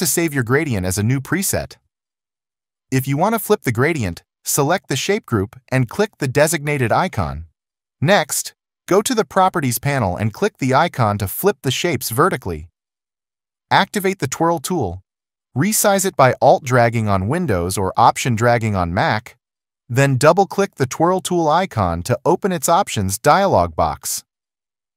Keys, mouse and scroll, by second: 15.6 alt+click.